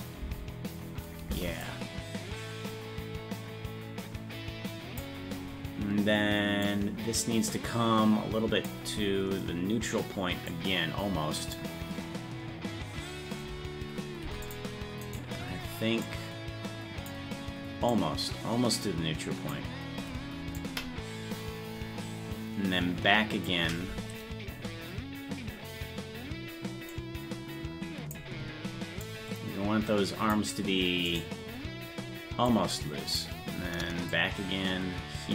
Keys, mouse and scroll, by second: 0.2 space, 1.7-5.0 drag, 1.7 space, 6.7-8.7 drag, 10.5-11.6 drag, 14.3 i, 15.1 right click, 16.1-17.1 drag, 17.9-19.5 drag, 20.6-23.5 drag, 26.9-28.2 drag, 29.0-30.3 drag, 31.2 right click, 32.5 click, 34.1-35.3 drag.